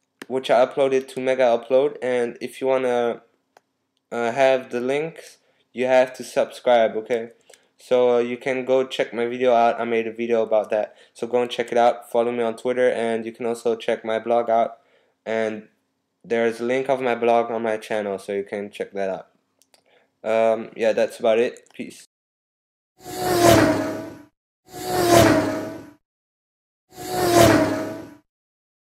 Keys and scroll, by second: 16.2 typing.